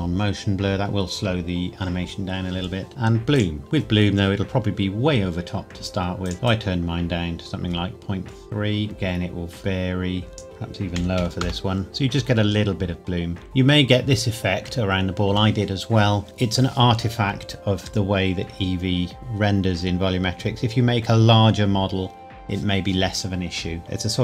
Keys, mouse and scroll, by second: 3.3 click, 6.2 click, 6.4 click, 11.0 KP_Decimal, 11.2 KP_1, 11.4 KP_Enter, 18.4-19.1 scroll up 2, 19.1-21.1 scroll down 2.